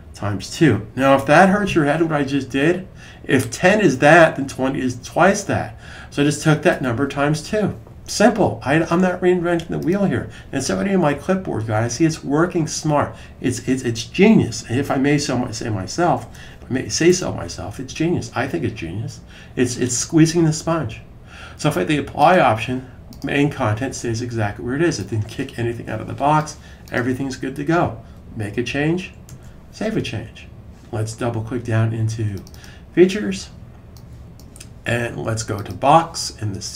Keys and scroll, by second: 1.0-1.8 typing, 16.0 typing, 29.2 super+s.